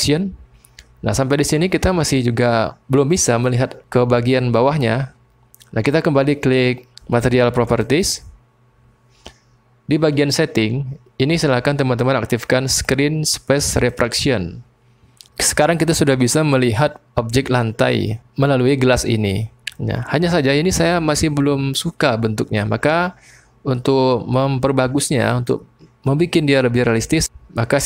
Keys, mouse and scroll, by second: 0.0-1.9 drag, 7.8 click, 13.9 click.